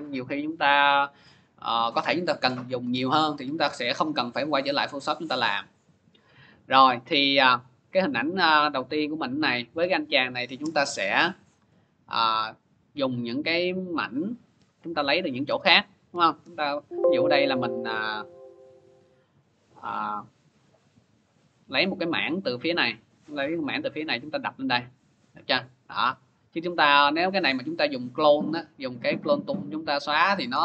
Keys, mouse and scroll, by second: 6.5 click, 10.3 click, 11.5 click, 12.3 click, 13.0 click, 13.7 click, 14.1-15.0 scroll, 15.0-15.4 scroll, 15.2 click, 15.9-16.7 scroll, 16.7 click, 17.7 click, 18.7 click, 19.7-20.9 typing, 27.3 click, 28.8 click.